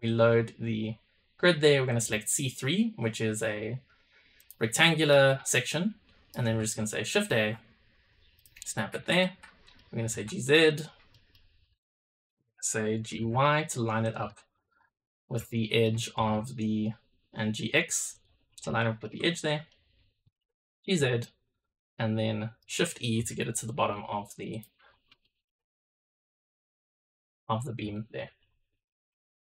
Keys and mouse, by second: 0.7-4.4 drag, 4.7 middle click, 5.4-6.3 shift+middle drag, 6.5 shift+a, 9.1-9.7 middle drag, 9.5 click, 9.9 g, 11.0 middle click, 11.8 click, 13.0 g, 14.2 shift+middle drag, 15.1 middle click, 15.5 shift+middle click, 18.7 middle drag, 19.3 middle click, 20.2 g, 21.1-22.6 shift+middle drag, 23.1 shift+e, 23.6 shift+middle drag, 24.4 middle click, 25.1 shift+middle drag, 27.9 shift+middle drag, 28.6-29.0 middle drag, 29.2 shift+middle drag.